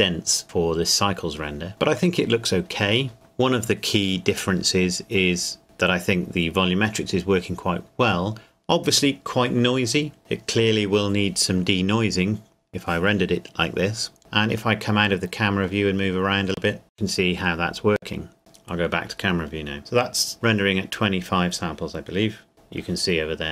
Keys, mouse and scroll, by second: 14.7 middle click, 22.5 KP_0.